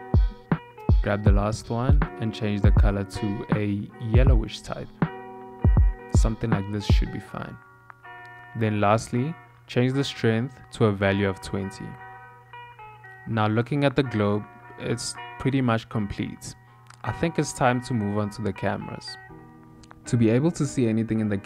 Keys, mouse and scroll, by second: 8.4 n, 9.1 click, 9.7 click, 16.3 click, 16.8 ctrl+middle click, 19.5 click, 21.1 scroll up 1, 21.1 scroll down 1, 21.2-21.4 scroll up 2.